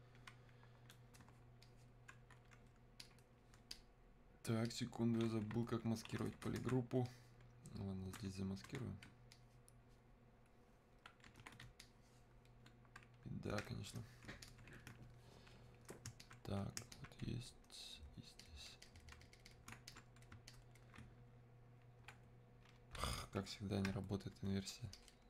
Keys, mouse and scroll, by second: 7.1-25.2 ctrl+shift+drag.